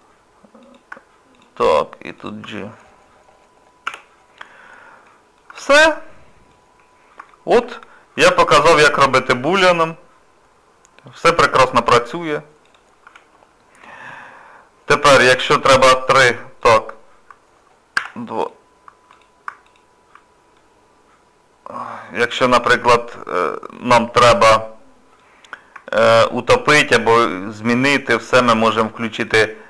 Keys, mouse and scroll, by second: 0.6 click, 1.3 shift+click, 3.9 j, 4.3 scroll up 1, 4.3-5.0 scroll down 2, 5.0 middle click, 5.5 Tab, 5.9 middle click, 6.7 scroll down 2, 7.3 shift+middle click, 7.8 middle click, 11.7 scroll up 1, 11.7 scroll down 1, 12.7 click, 13.0 Tab, 13.7-14.0 scroll up 3, 15.8 3, 16.6 click, 18.0 2, 18.4 click, 19.1 click, 19.7 alt+click, 20.6 middle click, 25.4 scroll down 1, 25.9 shift+middle click, 26.4 middle click, 27.3 shift+middle click, 29.2 click.